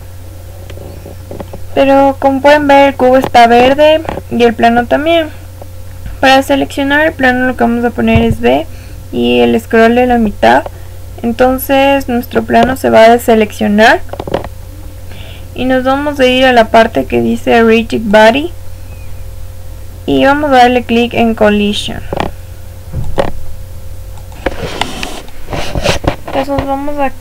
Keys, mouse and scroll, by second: 1.3-8.1 middle drag, 1.3 scroll down 1, 4.0-4.7 scroll up 1, 4.7 scroll down 1, 6.9-8.1 scroll down 1, 8.1 b, 11.5-16.0 middle drag, 16.0 click, 18.0 click, 21.0 click, 25.1 click.